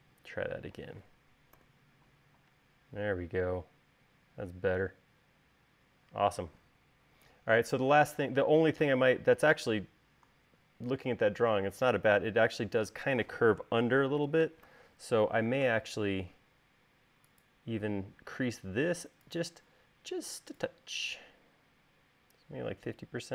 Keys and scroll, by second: 1.7 u, 15.0 u.